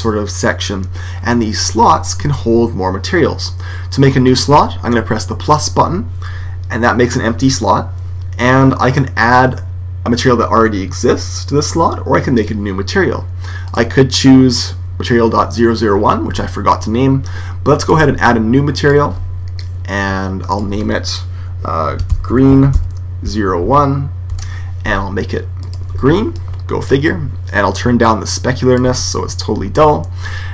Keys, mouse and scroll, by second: 5.5 click, 13.5 click, 18.7-22.3 drag, 22.5 e, 25.5 click, 27.9 click.